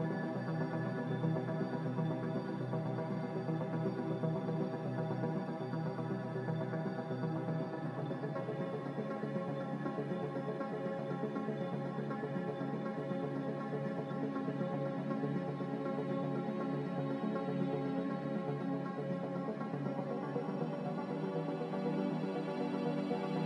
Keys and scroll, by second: 0.6 1, 0.8 Return.